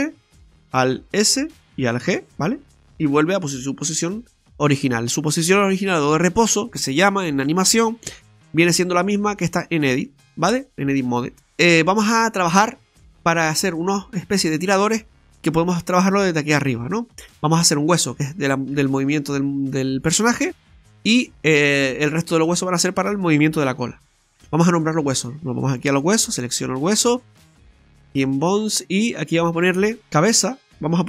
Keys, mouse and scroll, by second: 0.0 alt+r, 1.2 alt+s, 2.1 alt+g, 4.0-4.4 scroll up 1, 4.5 shift+middle click, 4.5 scroll up 1, 8.7 click, 11.8-12.4 scroll up 4, 12.4 middle click, 13.3-13.7 scroll down 3, 13.8 shift+middle click, 14.3-14.6 scroll down 2, 14.5 middle click, 17.4-17.8 scroll down 3, 17.8 right click, 23.9-24.3 scroll down 1, 29.3 click, 30.7 click.